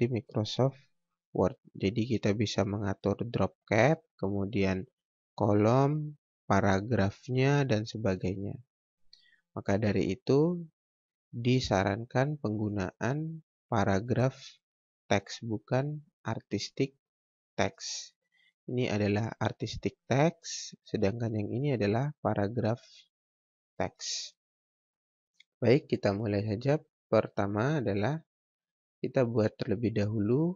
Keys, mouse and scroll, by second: 16.1 click, 21.2 click, 27.8 Delete, 27.9 click, 28.5 Delete, 28.8-29.4 scroll down 1, 29.4-30.5 scroll up 1.